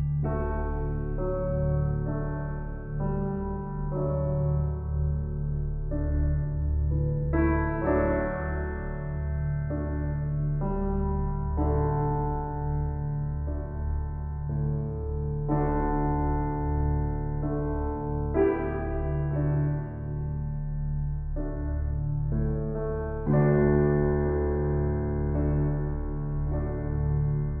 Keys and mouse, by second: 0.0 click, 1.5 click, 4.9 click, 7.0 click, 7.2-8.7 drag, 9.1 ctrl+alt+click, 9.5 alt+drag, 10.1-11.0 drag, 11.0 Delete, 12.7 ctrl+s, 13.6-16.4 alt+shift+drag, 15.9 1, 16.8-17.8 ctrl+alt+shift+drag, 17.9 ctrl+click, 18.9 g, 19.2 z, 20.2 click, 23.5 ctrl+s, 25.1-27.6 drag.